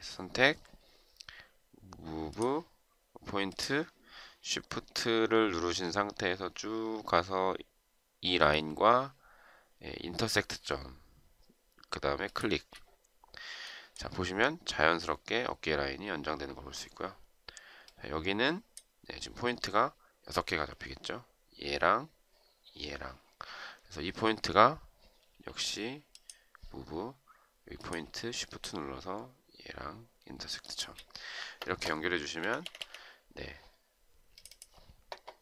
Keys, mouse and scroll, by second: 11.9 shift+click, 30.4 shift+click, 32.2 Escape, 32.4 Escape, 32.6 Escape.